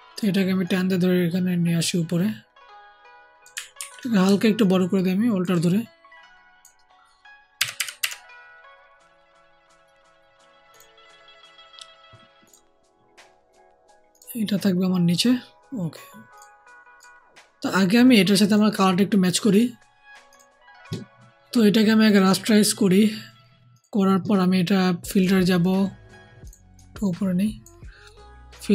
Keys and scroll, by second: 3.7 ctrl+t, 4.2 ctrl+alt+t, 7.5 Left, 7.7 Left, 7.9 Left.